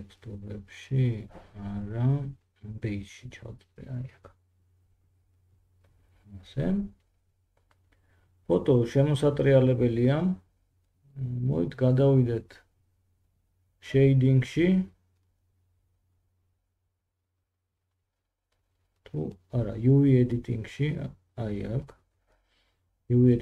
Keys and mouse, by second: 19.3 Tab.